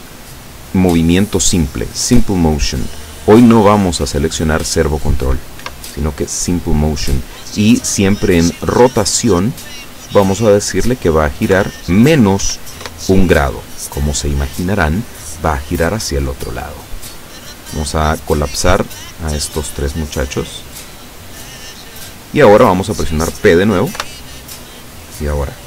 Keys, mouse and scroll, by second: 3.4 click, 5.7 Escape, 9.7 click, 11.6 KP_Subtract, 12.4 KP_1, 12.9 Return, 18.5 click, 19.5 click, 20.3 click, 21.5 click, 24.1 p.